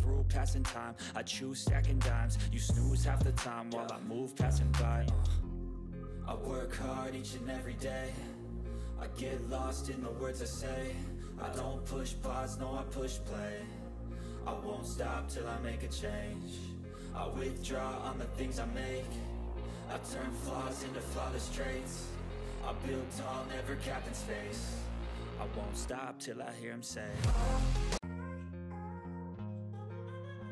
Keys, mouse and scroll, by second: 1.2 click, 1.2 click, 3.8 Return, 5.5-7.7 typing, 9.5 Return, 9.5-10.8 typing, 12.2 Return, 12.2 click, 12.5-13.8 typing, 14.0 click, 15.9-20.6 typing, 16.0 click, 21.2 click, 24.6 click, 24.6 typing, 24.6 click.